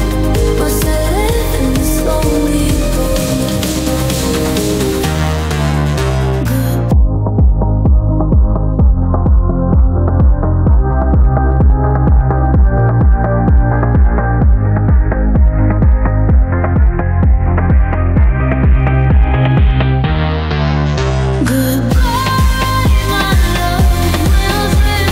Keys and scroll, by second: 7.0 space, 17.8 ctrl+g, 19.1 ctrl+z.